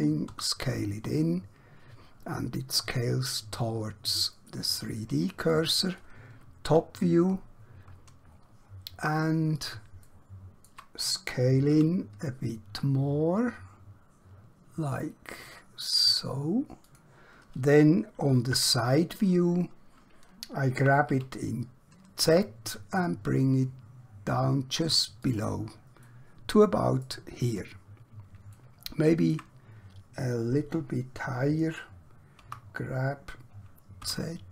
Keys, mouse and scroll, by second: 0.3 typing, 5.5 click, 6.6 KP_7, 7.9-8.3 scroll up 1, 10.1 shift+middle click, 11.8 s, 16.8 click, 18.5 KP_3, 21.1 g, 25.2 click, 26.1 middle click, 27.5 scroll up 1, 27.9-28.5 scroll down 1, 28.6 shift+middle click, 32.5 g, 34.0 z.